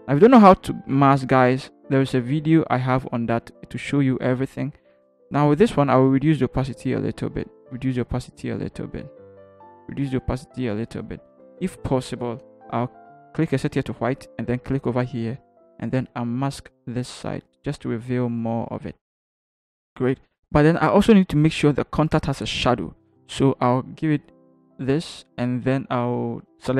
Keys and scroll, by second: 13.2 x, 19.4 ctrl+h.